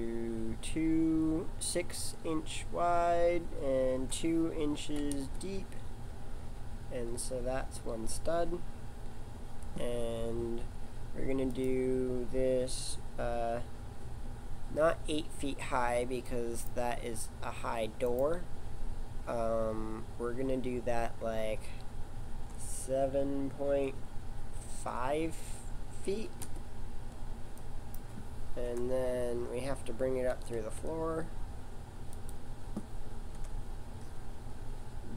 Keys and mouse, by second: 28.6 KP_1, 30.3 g, 33.4 KP_7.